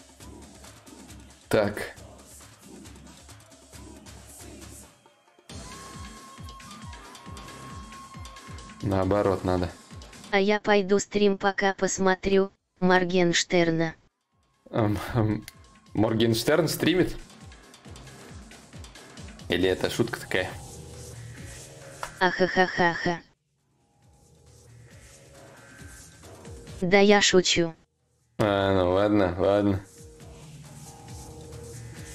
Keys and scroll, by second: 6.9 ctrl+z, 11.8 ctrl+z, 21.6 z, 28.2 z.